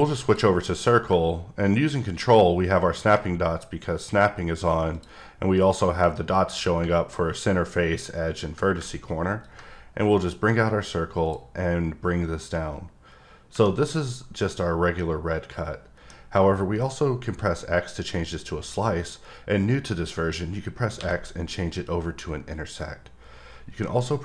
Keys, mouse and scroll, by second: 0.2 click, 4.9 click, 9.4 click, 9.4 click, 10.0-11.5 drag, 14.9 middle click.